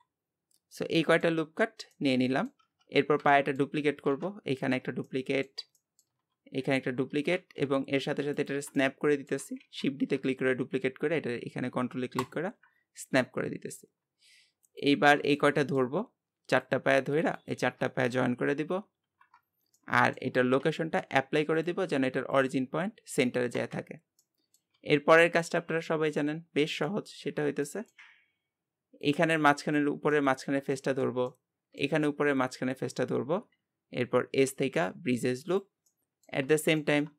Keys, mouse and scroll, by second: 0.5-0.8 scroll down 1, 0.8 middle click, 1.5-1.9 scroll up 1, 1.9 middle click, 2.6 Tab, 2.9 scroll down 2, 3.3 shift+middle click, 3.9 shift+d, 5.0-6.6 middle drag, 6.6 shift+d, 8.8 middle click, 9.6 shift+d, 13.2-14.6 middle drag, 14.6 shift+click, 15.3-16.5 shift+middle drag, 16.5-19.0 shift+drag, 19.0 ctrl+j, 19.8 middle click, 20.6 ctrl+a, 24.0 scroll down 2, 24.2 middle click, 24.7 Tab, 26.2 click, 26.8 middle click, 27.4-27.7 scroll up 1, 27.7 shift+middle click, 28.2-29.0 scroll up 1, 29.0-30.1 drag, 30.1-32.3 middle drag, 32.3-35.9 shift+drag, 35.9-37.1 middle drag.